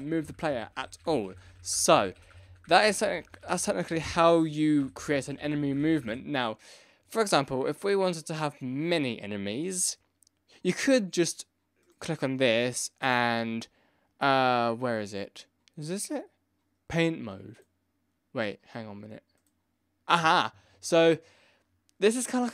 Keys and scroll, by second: 0.2 Left, 0.2 Down, 0.2 Right, 0.4 Down, 1.0 Down, 1.1 Right, 1.2 Left, 1.4 Left, 1.8 Left, 1.8 Down, 2.2 Up, 2.2 Right, 2.3 Left, 2.4 Down, 2.4 Right, 2.6 Left, 2.9 Up, 3.0 Left, 3.0 Right, 3.2 Down, 3.2 Left, 3.4 Up, 3.6 Left, 3.7 Down, 3.8 Left, 4.1 Up, 4.3 Left, 4.8 Up, 4.8 Right, 4.9 Left, 5.0 Down, 5.0 Right, 5.1 Left, 5.3 Down, 5.6 Down, 5.7 Right, 5.9 Left.